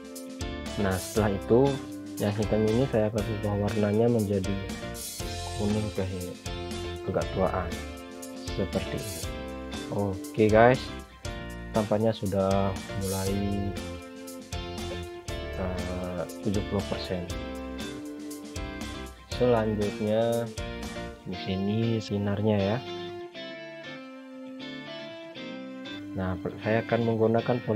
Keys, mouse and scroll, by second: 3.5 scroll up 1, 4.3 click, 7.1 click, 8.4-9.3 scroll down 1, 9.3 click, 11.1 shift+F3, 12.1 shift+F2, 12.8 click, 18.6-20.5 scroll down 1, 24.4 click.